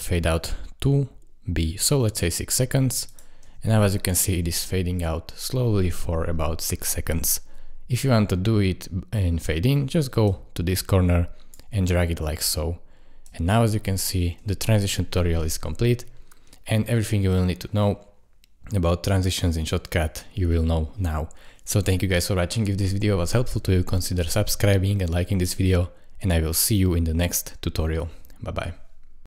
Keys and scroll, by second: 3.4 space, 14.4 space.